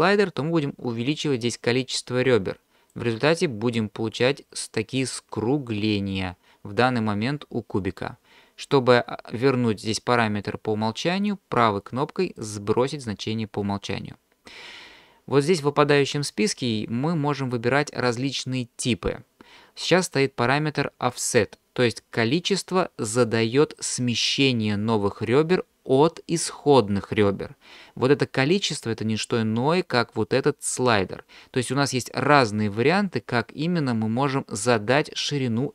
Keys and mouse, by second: 0.3-2.9 drag, 11.3-12.5 right drag.